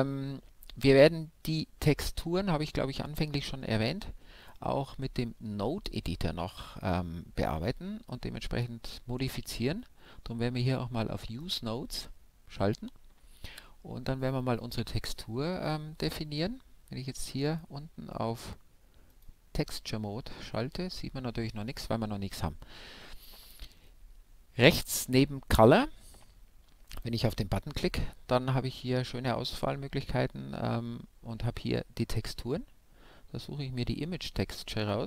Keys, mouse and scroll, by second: 9.6-14.7 drag, 15.6-17.4 drag, 18.7-20.6 middle drag, 25.0-26.8 drag, 35.0 click.